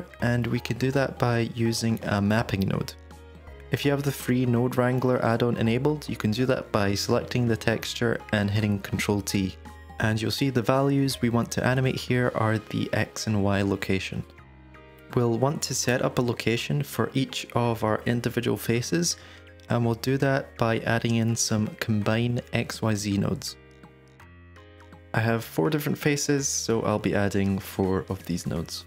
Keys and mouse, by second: 0.6 middle click, 1.4 middle click, 2.5 click, 4.3 ctrl+t, 7.1 middle click, 8.7 middle click, 11.1 click, 14.3 shift+click, 14.9-16.1 drag, 19.0 drag, 20.3 g, 22.8-23.2 drag, 23.3 shift+a, 27.1-27.7 middle drag, 28.0 shift+d.